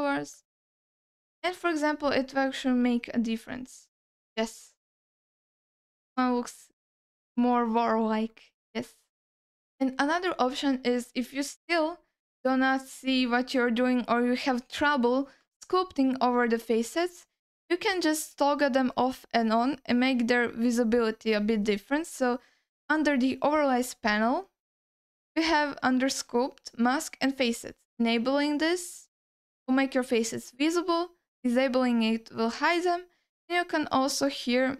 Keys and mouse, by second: 0.1-1.1 drag, 2.5 click, 4.0-5.2 alt+middle drag, 5.6 ctrl+middle click, 6.6 ctrl+alt+middle click, 7.4 middle click, 15.5 middle click, 18.8-24.0 drag, 24.7-34.7 drag.